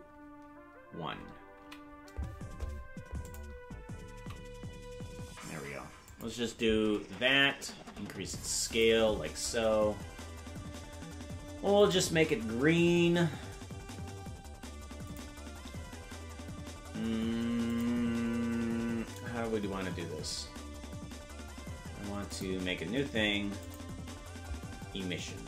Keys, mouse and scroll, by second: 1.6 s, 7.1 s, 11.8 click, 15.1-17.8 drag, 22.3 click, 23.7 click.